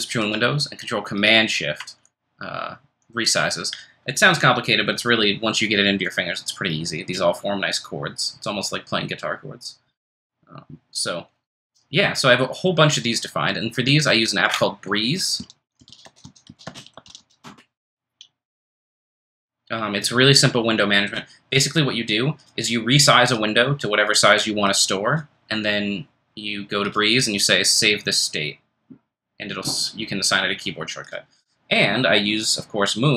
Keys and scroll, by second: 15.1-18.7 typing.